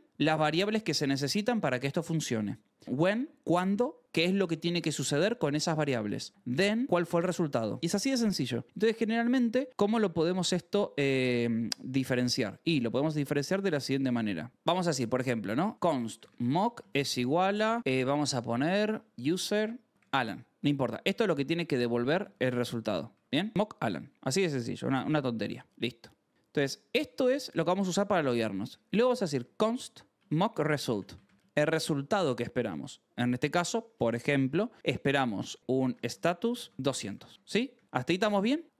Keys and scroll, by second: 7.8 Escape, 8.3-10.2 typing, 10.8 Escape, 11.3-17.1 typing, 14.0 Return, 18.5-26.5 typing, 25.6 ctrl+s, 26.9 Escape, 27.2 ctrl+s, 28.4-32.6 typing, 35.4-37.4 typing, 37.7 ctrl+s, 38.6 j.